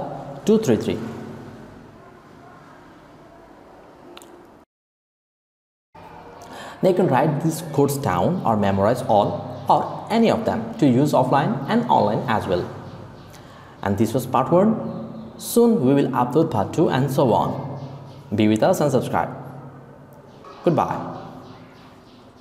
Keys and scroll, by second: 0.0-0.5 typing.